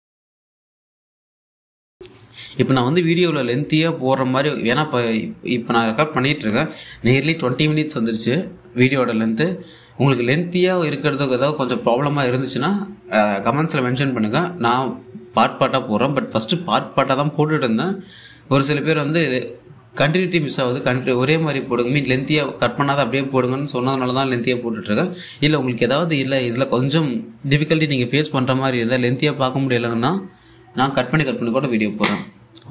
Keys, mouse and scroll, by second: 25.6-26.2 scroll down 1, 26.8-28.3 drag, 28.1-28.6 typing, 28.6-32.7 drag.